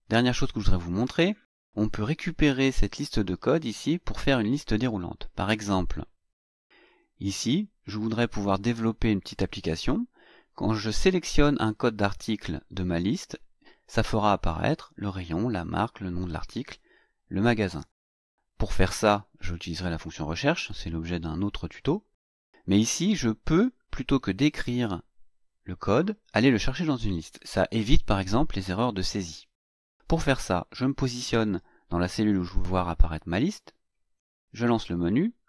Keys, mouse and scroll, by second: 6.9 click, 35.1 click.